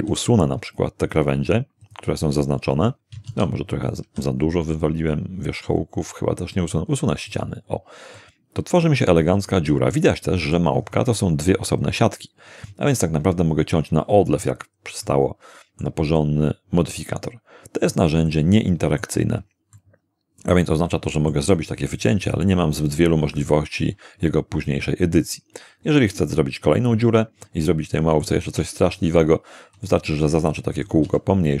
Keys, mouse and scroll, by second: 0.0 x, 1.8 click, 3.3 ctrl+z, 4.0 ctrl+x, 7.3 click, 8.2-10.7 middle drag, 10.8-11.4 scroll up 2, 14.3-14.9 scroll down 4, 15.0-16.0 middle drag, 16.2-18.1 middle drag, 18.3-19.2 shift+middle drag, 19.8-21.5 shift+middle drag, 23.5-25.4 middle drag, 26.8-27.2 scroll down 2, 27.4-28.4 middle drag, 28.5 Tab, 29.8 right click, 30.2 s, 30.7 click, 31.0 g.